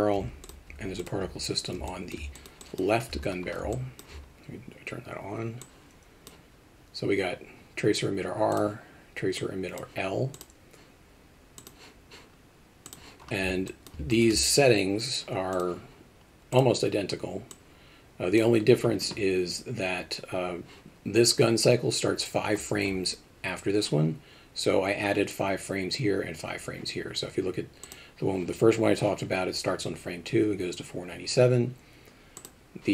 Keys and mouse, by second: 0.2 h, 0.4 click, 1.9 alt+middle drag, 2.4 alt+shift+middle drag, 2.6 alt+shift+middle drag, 3.7 alt+middle click, 5.8 click, 8.5 click, 9.4 click, 10.4 click, 11.6 click, 12.9 click, 13.7 alt+middle click, 14.1 alt+shift+middle click, 15.6 click, 16.5 click, 17.6 click, 27.9 click.